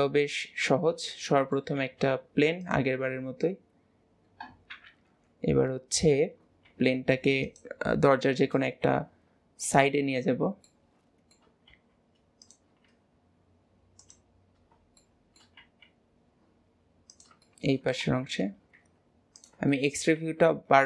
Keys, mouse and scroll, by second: 0.5 scroll down 2, 1.3-1.8 shift+middle drag, 1.8 shift+a, 3.4 scroll up 2, 5.1 KP_7, 6.0 scroll up 2, 10.7-11.8 middle drag, 15.0 middle click, 17.5-19.7 middle drag, 20.3-20.8 middle drag.